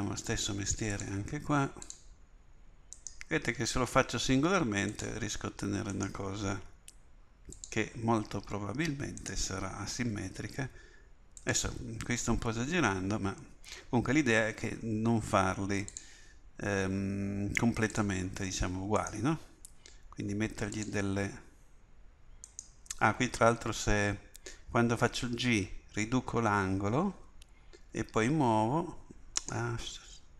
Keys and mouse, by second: 3.7 g, 6.7 g, 10.2 g, 14.2 ctrl+r, 19.1 click, 19.7 g, 23.2 click, 23.4 click, 25.0 g.